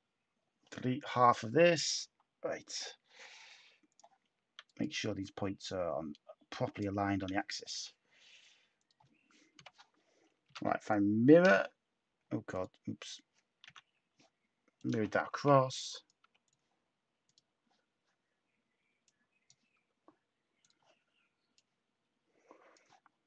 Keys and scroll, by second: 2.0 Delete, 7.7 v, 9.5-11.9 typing, 13.6 n, 15.3 /, 16.1 Tab, 19.7 Tab.